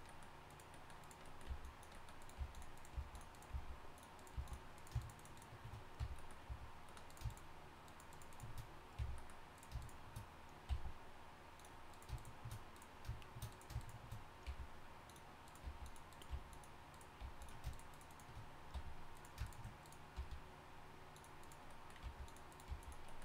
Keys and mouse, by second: 0.1 click, 1.2 click, 1.3 click, 1.5-4.3 typing, 6.0 f, 9.0 f, 10.7 v, 14.4 g, 15.6 g, 16.3 g, 17.2 g, 18.7 f, 20.1 g, 22.0 g, 22.7 g.